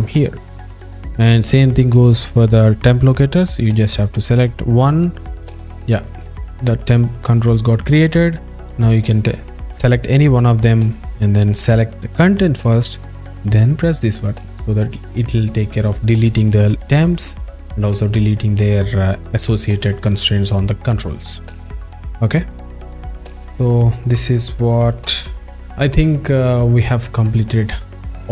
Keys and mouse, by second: 4.3 click, 14.0 click, 24.8 alt+middle click.